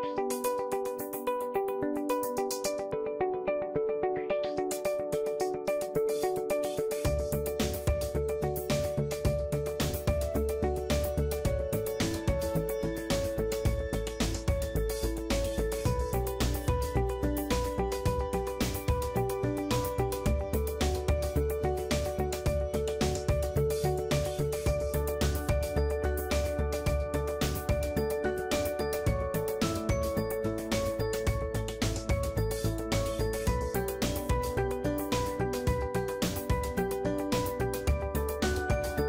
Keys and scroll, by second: 13.4 Return, 23.4 ctrl+shift+t, 32.6 Return, 33.4 ctrl+alt+shift+t, 38.6 ctrl+e.